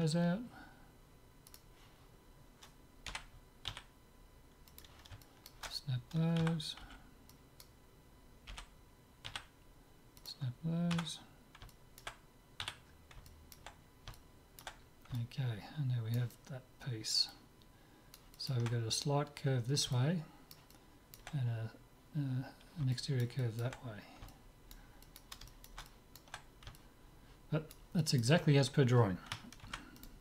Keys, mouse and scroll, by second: 1.5-3.5 drag, 3.3 g, 5.3-7.4 middle drag, 6.4 a, 7.0 b, 8.6 g, 11.0 Tab, 11.7-22.5 middle drag, 12.6 z, 23.0-29.6 middle drag, 29.8 ctrl+s, 29.9 middle click.